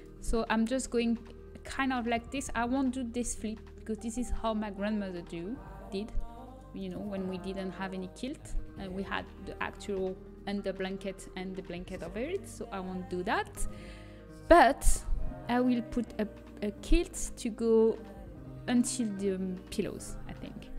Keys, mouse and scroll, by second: 5.0-5.6 scroll up 1, 5.6-6.1 scroll down 1, 6.1 right click, 6.2-8.1 middle drag.